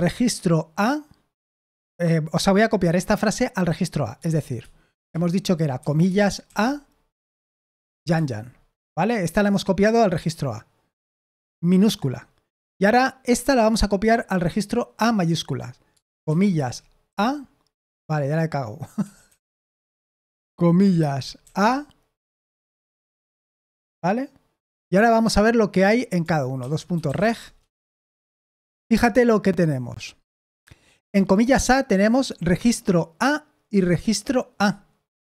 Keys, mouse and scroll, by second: 6.2-8.1 typing, 13.2 j, 17.0 a, 19.0 Escape, 19.2 Escape, 19.5 Escape, 20.9-21.4 typing, 22.5 typing, 26.6-27.7 typing.